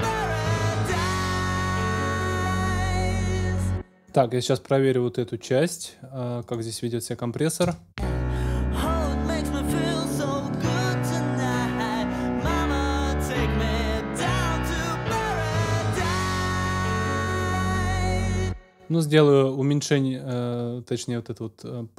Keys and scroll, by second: 3.5 space, 7.6 space, 18.2 space.